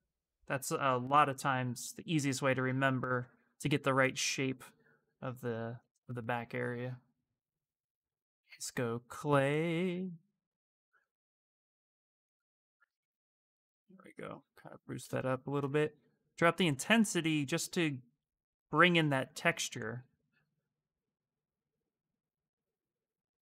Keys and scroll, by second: 2.4 s, 5.6 ctrl+z, 5.8 ctrl+z, 7.0 b, 7.8 c, 15.3 space.